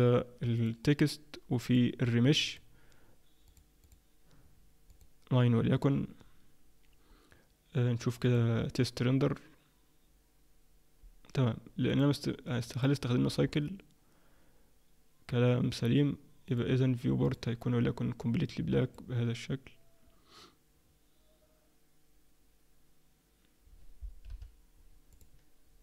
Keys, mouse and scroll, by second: 0.6 click, 4.9 click, 8.5 click, 11.9 click, 12.6 click, 13.4 scroll up 1, 15.6-16.4 scroll up 3, 16.4 click, 17.2 click.